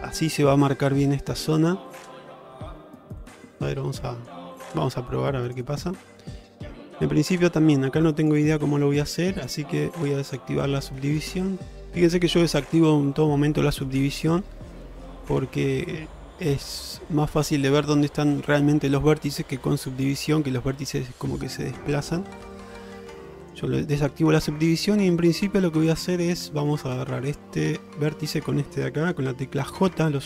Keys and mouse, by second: 7.1 middle click, 9.2 middle click, 10.3 click, 10.9 middle click, 11.5 shift+middle click, 11.9 middle click, 15.9-17.2 middle drag, 19.9 click, 23.5 click, 25.1 middle click, 26.2 shift+middle click, 26.6 middle click, 29.9 j.